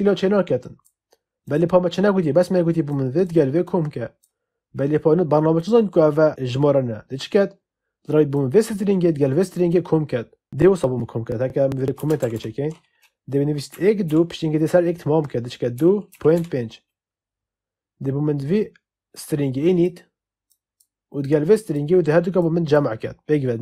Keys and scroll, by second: 11.9 space, 12.1 /, 13.6 1, 14.0 2, 15.4-16.7 typing.